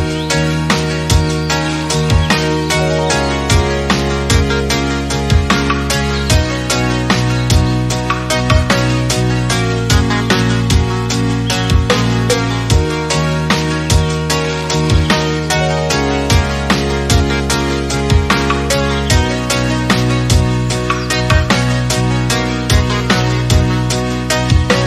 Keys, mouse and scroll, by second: 0.3 click, 1.1 click, 1.2 scroll up 2, 1.4 middle click, 1.7-2.8 scroll down 1, 2.8-5.0 drag, 5.0 scroll down 1, 5.3 middle click, 5.6-6.1 scroll up 1, 6.1-6.8 shift+middle drag, 6.8 click, 7.5-8.3 drag, 8.5-8.8 scroll down 5, 8.8-10.1 middle drag, 10.1-10.6 scroll up 1, 11.0-13.2 shift+middle drag, 13.2-13.6 scroll up 2, 13.6 click, 16.6 click, 17.1 middle click, 17.3-17.7 scroll up 4, 17.7-18.1 scroll down 1, 18.1 click, 20.3-20.6 drag, 20.7 scroll down 2, 20.8-22.0 middle drag, 22.0 scroll up 2, 22.2-22.7 middle drag, 22.7 click, 24.3 click.